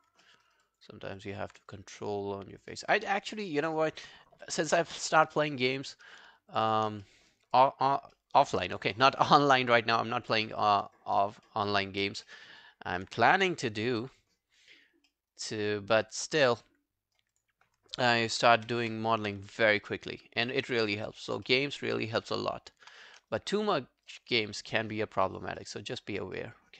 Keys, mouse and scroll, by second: 0.3 alt+middle click, 0.5 alt+right click, 0.7 alt+click, 1.2 alt+click, 1.7 right click, 4.4 shift+., 6.5 shift+click, 6.7 shift+click, 7.1 alt+middle click, 7.4 alt+scroll down 1, 7.6 alt+click, 8.2 alt+middle click, 8.3 alt+scroll down 1, 8.4 alt+right click, 8.7 alt+click, 10.5 alt+middle click, 10.8 alt+right click, 11.0 alt+click, 11.5 alt+middle click, 11.7 alt+right click, 11.9 alt+click, 12.3 alt+middle click, 12.5 alt+right click, 14.5 double click, 14.8 scroll down 3, 15.1 alt+middle click, 15.3 alt+right click, 15.6 alt+click, 15.9 alt+right click, 16.2 alt+click, 16.6 right click, 18.4 shift+., 18.6 shift+., 18.9 shift+., 21.5 alt+middle click, 21.8 alt+scroll down 1, 22.0 alt+click, 22.3 alt+right click, 22.6 alt+scroll down 1, 23.1 w, 23.3 right click, 25.0 alt+scroll down 1, 25.2 alt+click, 25.6 alt+middle click, 25.8 alt+right click, 26.1 alt+click, 26.4 alt+middle click.